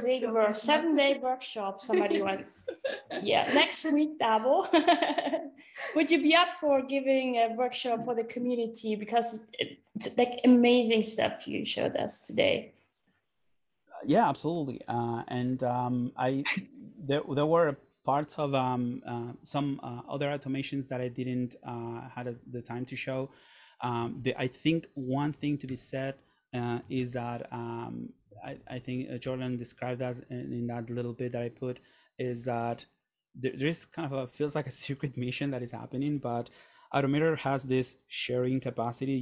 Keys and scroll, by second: 24.2 super+Tab, 26.1 super+t, 26.7-27.9 typing, 28.3 Down, 29.3 Return.